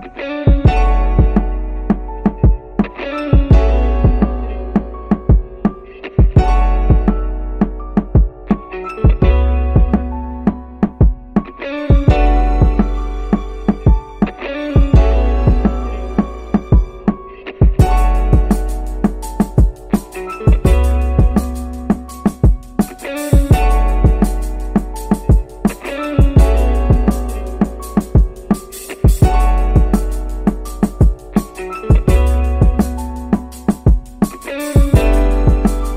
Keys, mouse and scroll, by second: 1.3 click, 4.5 shift+s, 10.2-18.4 drag, 19.7 click, 26.2 shift+s, 33.3-35.9 right drag.